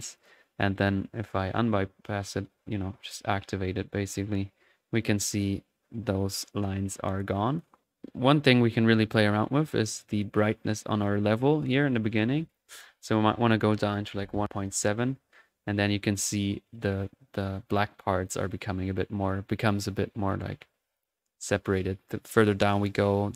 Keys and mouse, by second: 2.3-3.1 typing, 5.0-6.9 ctrl+drag, 7.3-8.5 drag, 10.1-12.3 drag, 12.5-17.1 drag, 20.1-21.8 drag.